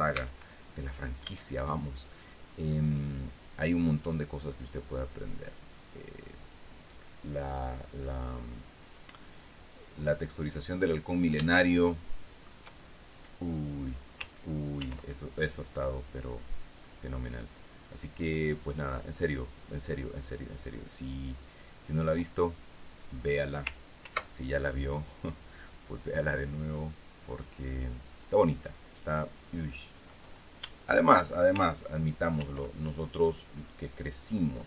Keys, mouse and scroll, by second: 0.7 a, 1.8 b, 2.4-3.5 drag, 3.5-7.2 drag, 12.1-13.2 shift+middle drag, 15.4 ctrl+r, 18.0 click, 19.3 click, 22.4 click, 24.6 ctrl+r, 25.2-27.9 ctrl+drag, 29.5 click, 30.3 right click, 32.9 ctrl+r, 33.5 ctrl+click.